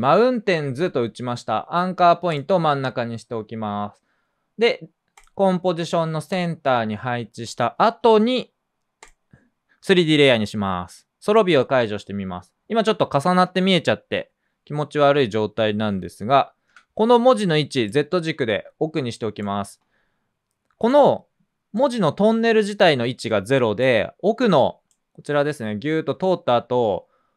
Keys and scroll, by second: 16.6 p.